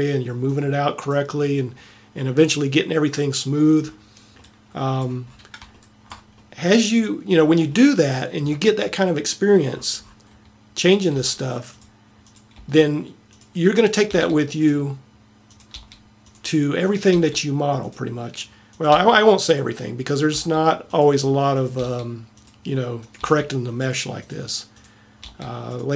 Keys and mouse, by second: 11.1 click, 11.2 g, 12.6 g, 14.1 g, 15.8 g, 17.1 g, 19.0 g, 20.4 g, 21.8 g, 23.4 g, 25.6 g.